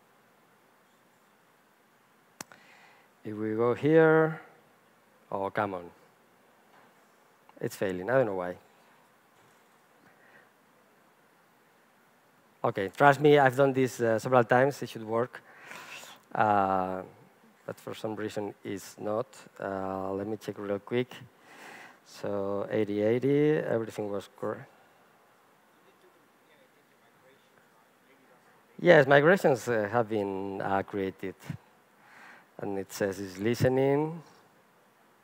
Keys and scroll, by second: 19.8 alt+F12.